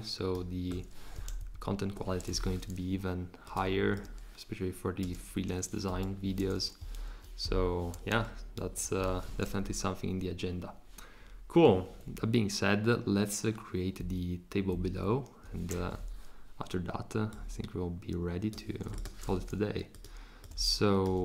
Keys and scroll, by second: 1.4 shift+Up, 5.9 Escape, 8.2 super+c, 8.6 super+v, 9.6 shift+Down, 14.7 shift+Down.